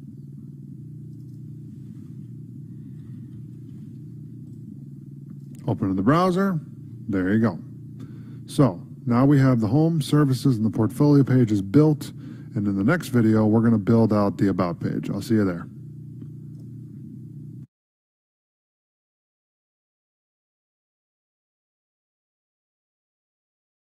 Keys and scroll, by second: 3.8 ctrl+s.